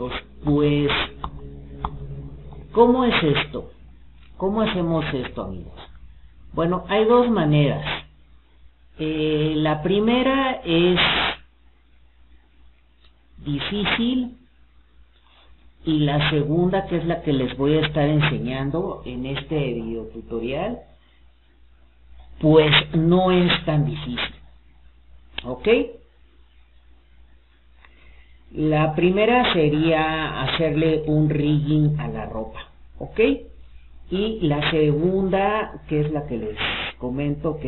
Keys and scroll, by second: 0.4 ctrl+z, 0.9 ctrl+z.